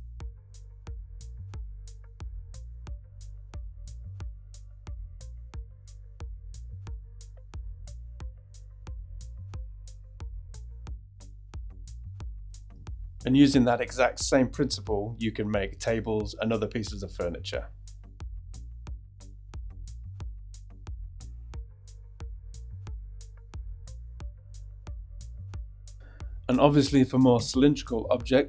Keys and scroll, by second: 3.2 shift+e, 4.2 super+b, 9.8 super+b, 12.3 Tab, 15.1 shift+z, 16.1 shift+super+r, 16.8 shift+x, 17.4 shift+a, 17.5 shift+x, 19.1 shift+e, 19.7 shift+e, 20.0 shift+e, 23.2 shift+Tab, 23.8 shift+super+Tab, 25.3 shift+q, 27.3 shift+a.